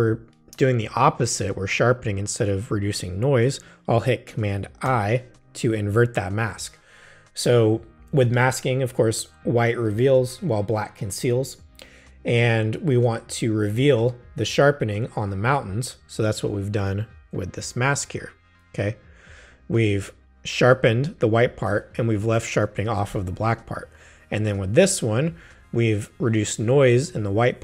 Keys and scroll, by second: 4.9 super+i.